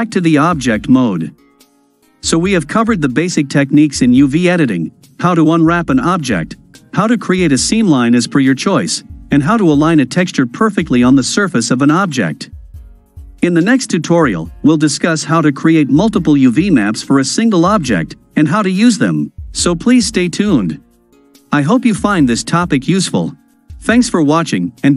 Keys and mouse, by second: 0.4 Tab, 1.5 click, 1.8-5.4 middle drag, 5.4-7.3 right drag, 7.8-9.2 ctrl+drag, 10.5 ctrl+click, 11.4-14.0 ctrl+middle drag, 15.1-17.4 middle drag, 18.5-19.3 ctrl+drag, 19.3-21.0 ctrl+middle drag, 21.0-22.6 ctrl+drag, 22.6-23.9 ctrl+middle drag, 24.4 ctrl+middle click, 24.9 ctrl+middle click.